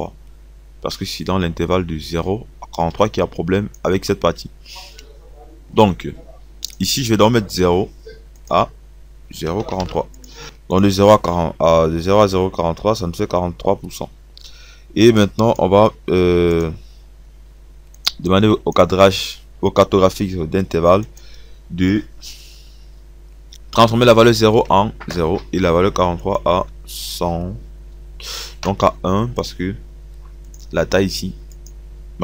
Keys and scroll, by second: 9.4 KP_4, 9.7 KP_3, 25.1 KP_0, 28.9 KP_1.